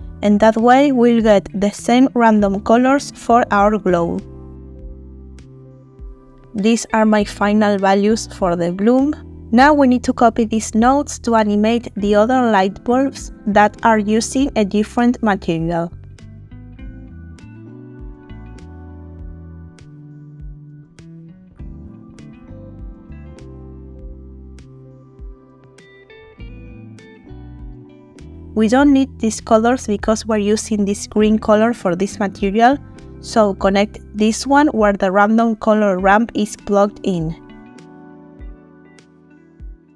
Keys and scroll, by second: 12.4 ctrl+c, 14.8 ctrl+v, 27.4 Delete, 39.0 Delete.